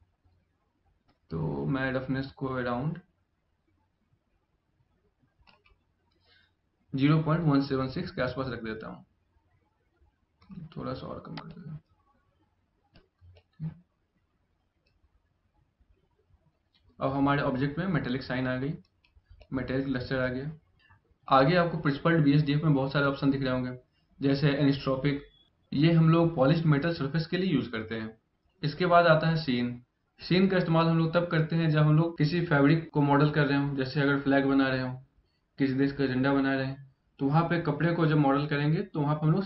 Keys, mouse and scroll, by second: 9.3 middle click, 11.1 click, 13.0 middle click, 19.0 middle click.